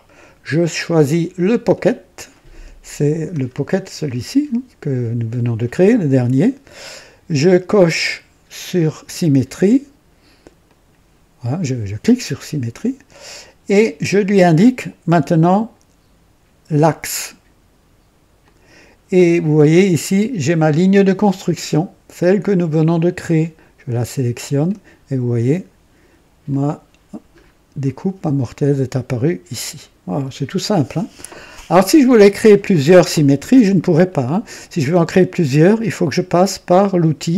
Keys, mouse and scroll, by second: 1.4 click, 3.2 scroll down 1, 4.0 click, 10.6 click, 18.3 click, 23.8 click, 26.4 click, 27.3 scroll up 1, 27.8 right click, 28.4-30.7 drag.